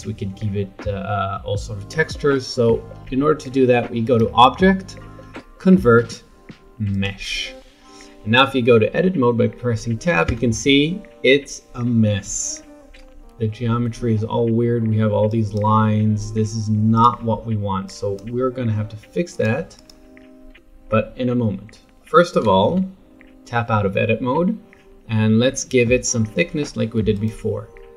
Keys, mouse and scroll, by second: 4.0-7.0 drag, 10.3 Tab, 15.3 click, 16.9 click, 17.8 click, 19.3 click, 19.7 click, 22.7 Tab, 27.1 click.